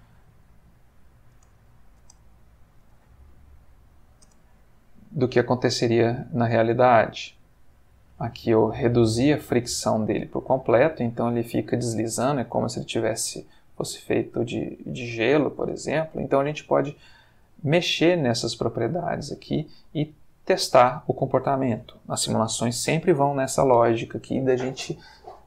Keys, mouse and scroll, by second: 1.3 space, 1.6 Escape, 2.0 space, 2.8 Escape, 3.8 click, 4.3 space, 13.0 Escape, 13.6-15.1 drag, 15.2 space, 19.6 Escape, 20.1-20.8 drag, 20.9 space, 23.8 Escape.